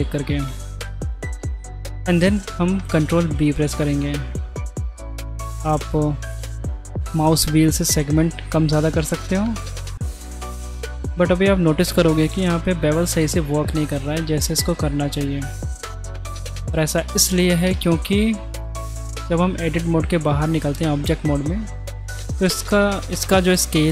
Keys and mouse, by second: 0.0 middle click, 2.0 middle click, 3.3 ctrl+b, 10.6-12.0 middle drag, 13.3-14.8 middle drag, 15.4 middle click, 16.5 ctrl+z, 17.6 Tab, 19.4 middle click.